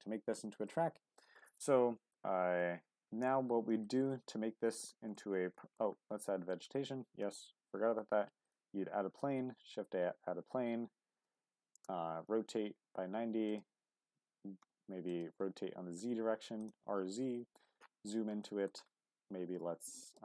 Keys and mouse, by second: 0.0 click, 0.7-1.2 middle drag, 1.6-2.1 middle drag, 2.6-3.3 middle drag, 3.8-4.1 shift+middle drag, 4.3-4.7 middle drag, 4.9 shift+middle drag, 5.6 middle click, 6.6 shift+click, 7.2 shift+a, 9.5 r, 9.8 x, 11.1 KP_9, 11.3 KP_0, 11.7 Return, 12.7 r, 13.0 x, 13.5-14.6 drag, 14.6 g, 14.9 z, 15.1 click, 15.2 r, 15.4 z, 16.6 click, 17.0 q, 18.4 middle drag, 19.3 s, 19.6 x, 20.1 click.